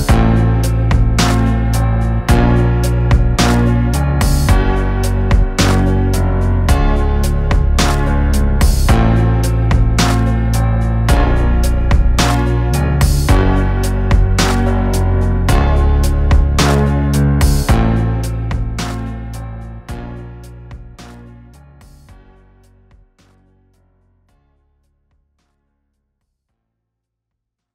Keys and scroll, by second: 2.6 Tab, 5.5 ctrl+r, 11.9 Tab, 25.0 KP_1.